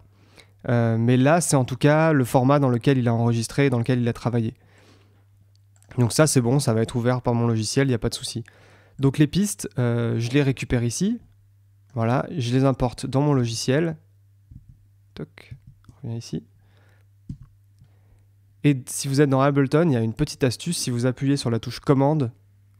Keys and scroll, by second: 13.3 super+Tab, 17.2 Tab.